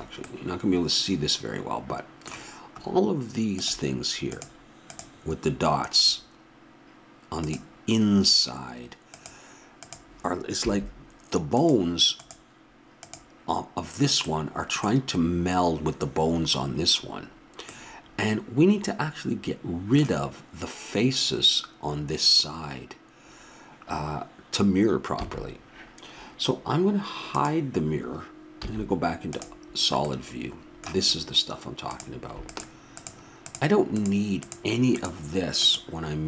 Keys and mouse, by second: 1.4-2.9 middle drag, 3.6-6.6 drag, 4.3 middle click, 6.1 middle click, 7.4 click, 10.7 a, 14.3 click, 14.7 middle click, 17.9-25.2 middle drag, 25.2 a, 27.3-29.2 drag, 30.2-31.9 middle drag, 31.9-36.2 drag.